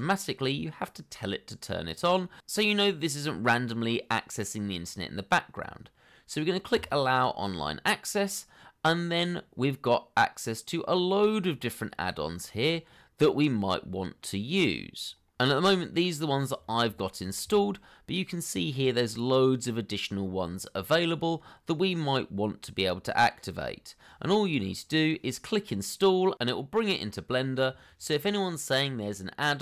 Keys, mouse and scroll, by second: 10.9 scroll down 1, 12.4 scroll up 1, 16.2 scroll down 1.